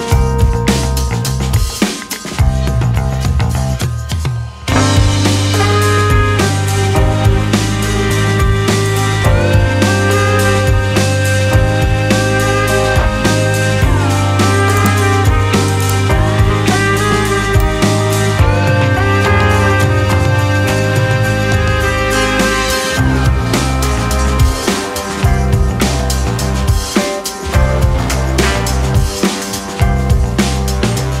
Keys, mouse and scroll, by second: 6.7 ctrl+r, 7.4 g, 8.5 click, 9.1 e, 11.3 s, 12.3 click, 13.1 e, 16.4 ctrl+r, 18.9 scroll up 2, 19.1 shift+middle click, 19.4 click, 21.7 shift+click, 24.0 shift+click, 24.9 g, 26.4 click, 26.6 g, 27.5 click, 27.6 g, 28.2 click, 28.3 g, 29.2 g, 29.9 click, 30.1 g, 30.8-31.2 scroll down 1.